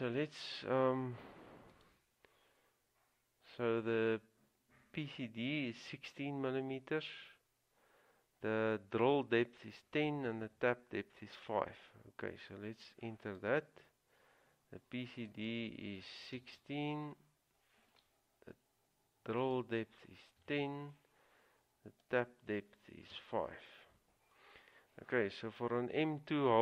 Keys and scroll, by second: 16.3-17.2 typing, 20.6 typing, 22.2 typing, 23.3 typing.